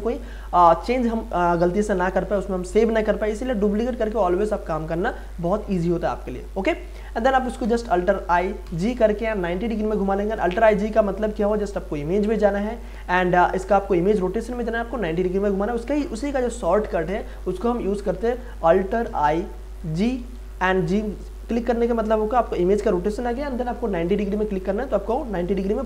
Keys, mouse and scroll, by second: 7.6 alt+i, 8.6 g, 11.4 click, 17.3 click, 18.0 click, 19.0 alt+i, 20.2 g.